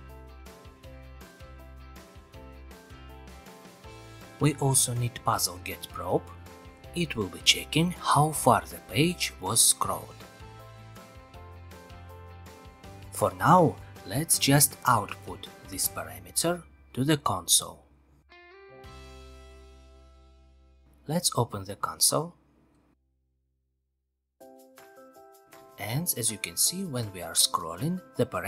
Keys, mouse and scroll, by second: 0.6 click, 2.7 click, 3.4 click, 5.6-6.1 typing, 9.4 click, 10.1 ctrl+c, 10.3 ctrl+v, 12.3 click, 13.8 click, 16.0 click, 17.4 click, 18.2 click, 19.0 click, 19.2 ctrl+r, 20.5 F12, 22.7-23.7 scroll down 5, 24.8 click, 25.2-28.4 scroll, 27.0-28.4 middle drag.